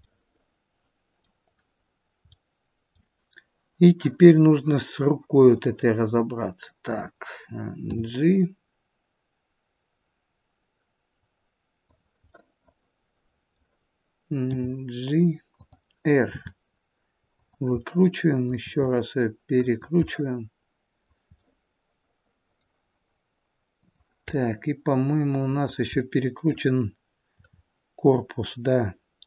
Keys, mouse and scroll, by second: 1.7-2.7 scroll down 2, 2.1 middle click, 5.4 click, 6.7 click, 7.7 g, 12.2 middle click, 14.5 g, 16.3 r, 17.7 middle click, 18.6 r, 20.0 middle click, 21.2 middle click, 23.7 click, 24.4 middle click, 25.9 middle click, 27.3 r.